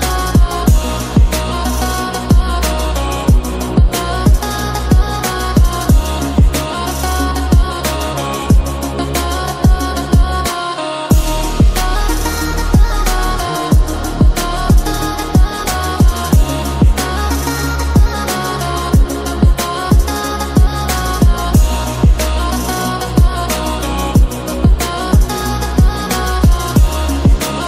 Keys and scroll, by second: 9.1 Up, 9.8 Up, 10.8 ctrl+e, 19.0 ctrl+-.